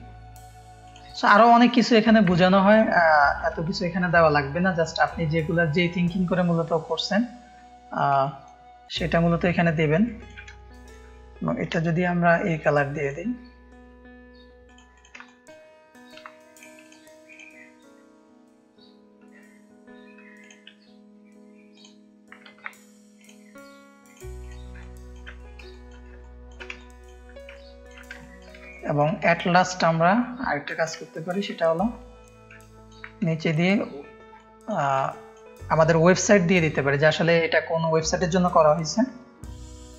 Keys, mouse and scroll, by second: 0.8 click, 1.1 click, 2.8 ctrl+space, 2.9 ctrl+click, 3.6 ctrl+space, 3.8 ctrl+click, 4.3 ctrl+click, 4.4 ctrl+space, 4.9 click, 5.5 ctrl+space, 5.5 click, 5.9 click, 6.6 click, 6.6 space, 7.6 ctrl+space, 7.6 ctrl+click, 8.2 click, 8.2 space, 8.8 drag, 10.0 ctrl+space, 10.0 ctrl+click, 10.5 click, 11.8 [, 14.6 click, 14.9 click, 15.2 click, 15.2 space, 16.1 shift+click, 17.2-18.7 drag, 21.7-22.4 drag, 22.4 ctrl+z, 23.1 click, 24.0-24.7 drag, 24.9 ctrl+click, 25.1 ctrl+space, 26.2 ctrl+space, 26.2 ctrl+click, 26.7 click, 26.7 space, 27.5 ctrl+space, 27.5 ctrl+click, 28.2 click, 28.2 space, 28.7 ctrl+space, 28.7 ctrl+click, 29.3 click, 29.3 space, 30.4 click, 30.4 space, 31.0 ctrl+space, 31.0 ctrl+click, 31.9 click, 32.6 ctrl+space, 32.6 ctrl+click, 33.2 click, 33.2 space, 34.3 ctrl+space, 34.3 ctrl+click, 34.7 ctrl+space, 35.0 click.